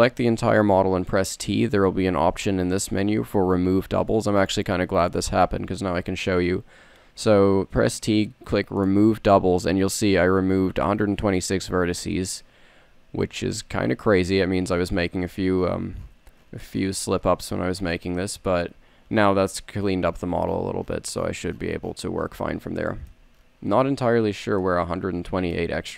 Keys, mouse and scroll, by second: 0.8 t, 13.7 n, 14.4 n, 14.8 t, 18.1 t, 18.8 middle click, 22.0 middle click, 23.9 a.